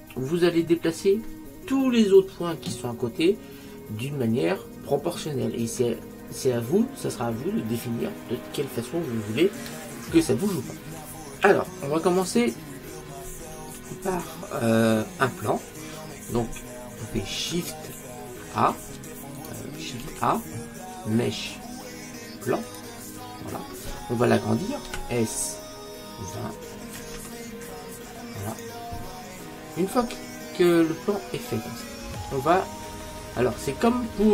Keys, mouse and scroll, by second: 19.4-22.8 right drag, 20.2 shift+a, 24.9 s, 29.6-31.6 middle drag, 33.1-33.6 scroll down 1, 33.6-34.3 scroll down 1.